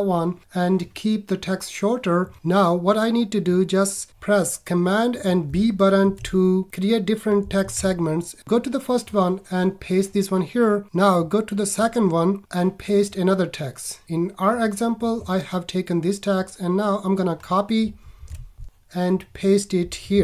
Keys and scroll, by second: 6.0 super+b, 18.1 super+c, 18.9 super+Tab, 20.1 super+a.